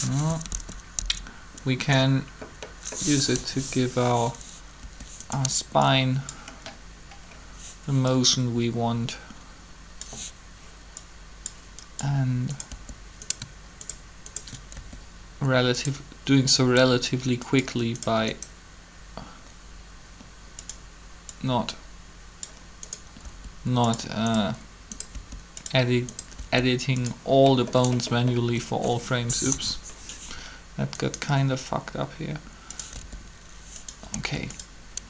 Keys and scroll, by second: 0.3 Up, 0.4 Up, 1.0 Up, 3.2 7, 4.8 r, 12.7 r, 14.7 shift+r, 23.2 r, 25.1 r, 26.3 r, 29.5 3, 32.9 r.